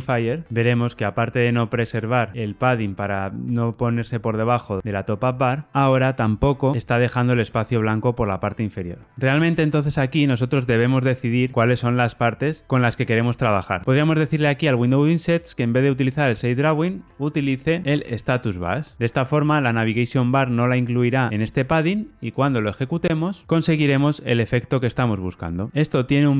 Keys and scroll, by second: 13.8 super+z, 22.3 ctrl+r.